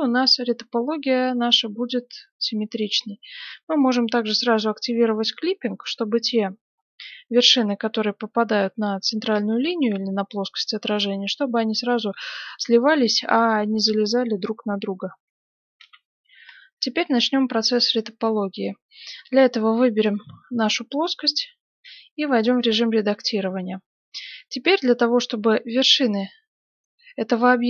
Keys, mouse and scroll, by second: 4.1-6.7 drag, 5.2-6.9 middle drag, 7.0-12.4 middle drag, 12.4-14.0 scroll up 1, 14.0 scroll up 1, 14.2-15.7 scroll down 1, 15.7 F9, 17.9 middle click, 19.9 right click, 21.8 Tab, 22.3 middle click, 26.6 right click.